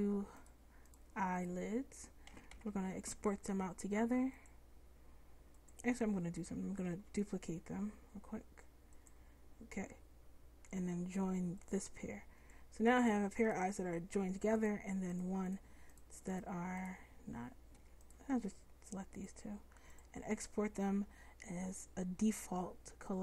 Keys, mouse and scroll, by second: 2.4 a, 2.6 a, 7.0 shift+d, 13.5-19.8 middle drag.